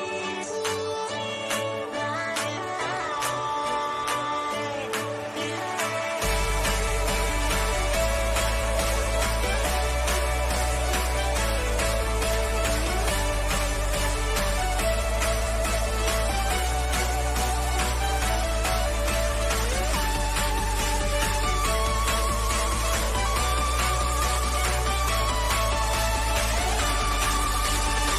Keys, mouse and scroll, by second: 1.9 click, 4.4-7.1 drag, 7.1 Up, 8.1 click, 12.2 scroll down 1, 12.8 click, 13.4 scroll down 1, 16.4 scroll up 1, 22.0-23.9 middle drag, 23.9-24.3 scroll down 1, 24.4 middle click, 25.3-28.1 middle drag.